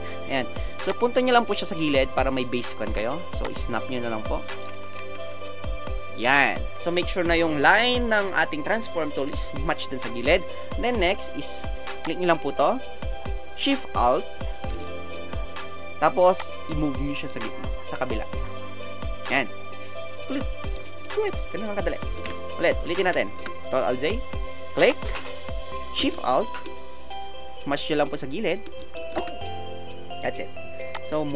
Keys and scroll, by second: 4.8 Right, 4.9 Right, 5.0 Right, 5.2 Right, 5.3 Right, 6.0 Right, 22.2 alt+shift+Return, 23.0 ctrl+alt+shift+z, 29.1 alt+shift+Return.